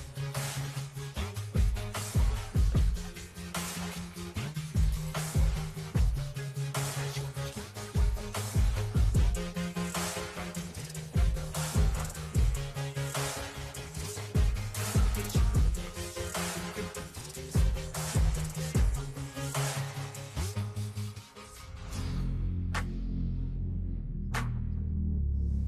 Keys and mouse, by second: 0.0 Up, 1.8 click, 2.2 Down, 3.1 shift+Down, 3.4 shift+Down, 6.6 t, 7.1 click, 8.4 Escape, 10.5 click, 11.8 click, 15.8-17.4 typing, 19.0-25.6 typing.